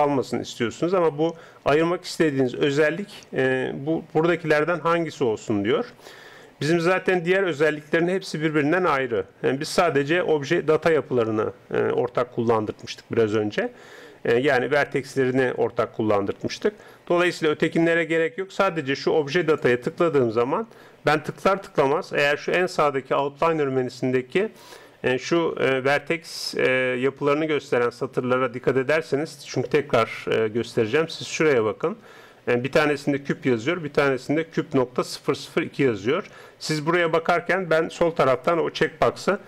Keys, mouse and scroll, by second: 19.4-21.4 drag.